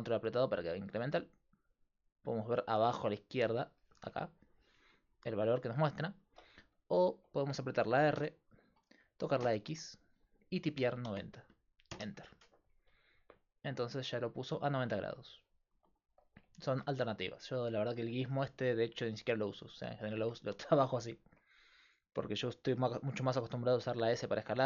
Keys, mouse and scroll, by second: 6.3 ctrl+z, 8.2 r, 19.7-21.6 drag, 20.6-21.6 right drag, 23.8 s.